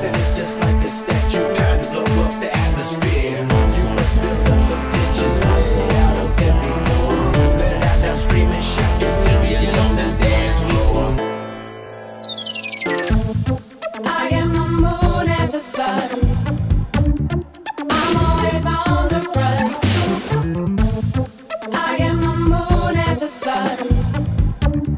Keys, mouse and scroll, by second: 2.6 click, 10.3 click, 10.9 click, 12.6 click, 15.5 click, 15.7 click, 18.4 click, 18.6 click, 21.4 click, 22.4 click, 22.6 click.